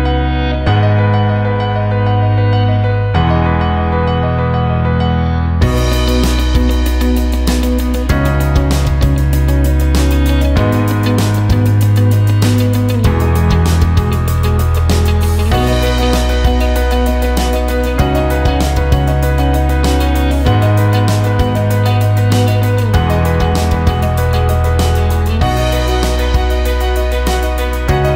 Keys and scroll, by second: 0.4 ctrl+space, 1.7 Delete, 21.5 space.